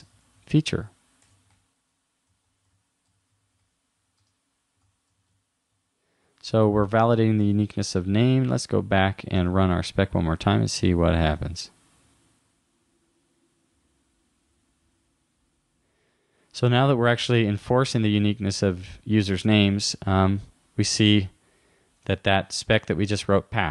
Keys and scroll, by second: 1.5 shift+-, 3.6 shift+-, 4.8 shift+;, 5.7 super+s, 8.2 super+w, 9.4 super+r, 22.1 super+w.